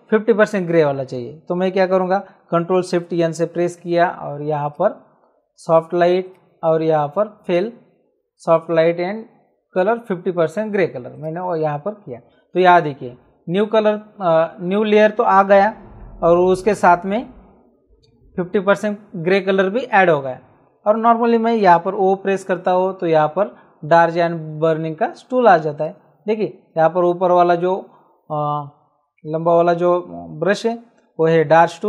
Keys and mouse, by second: 3.3 ctrl+shift+n, 4.6 click, 6.2 click, 7.4 click, 11.1 click, 21.8 o, 25.7 right click.